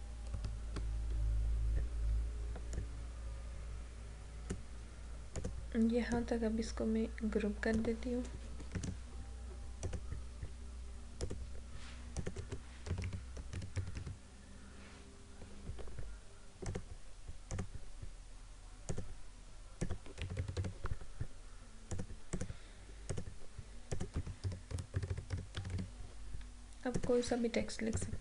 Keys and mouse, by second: 2.9-8.8 drag, 8.8 ctrl+g, 9.9 click, 12.7-14.5 typing, 16.8 click, 20.0-21.1 typing, 22.0 click, 23.9-26.3 typing, 27.0-28.2 drag.